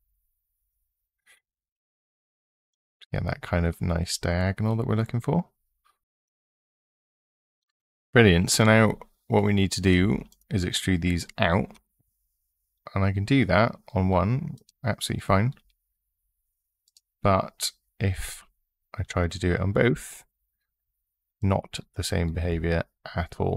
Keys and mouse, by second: 2.5 click, 9.7 3, 11.5 e, 13.6 click, 14.3 click, 15.4 e, 16.6 click, 19.7 e, 22.2 e.